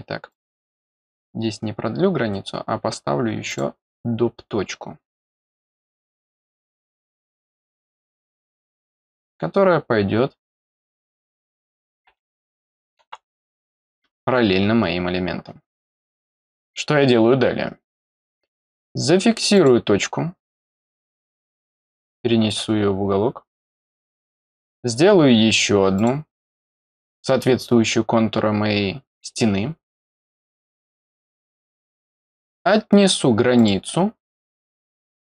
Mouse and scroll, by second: 0.2 click, 3.4 click, 6.5 click, 8.6 click, 13.3 click, 19.5 click, 22.4 click, 24.0 click, 25.9 click, 30.4 click, 33.5 click, 35.1 click.